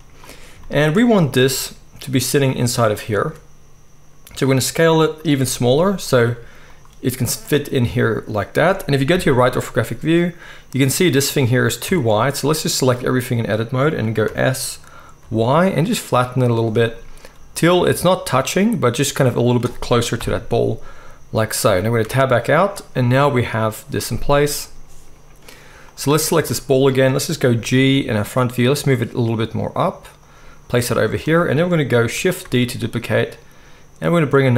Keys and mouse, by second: 1.4 g, 3.2 s, 5.3 g, 6.2 s, 9.1 KP_3, 11.1 click, 11.1-12.7 middle drag, 11.8 Tab, 12.7-16.6 drag, 14.2 s, 16.6-25.9 middle drag, 20.2 KP_1, 22.0 Tab, 25.9-26.4 drag, 26.4-34.5 shift+middle drag, 27.5 g, 32.4 shift+d.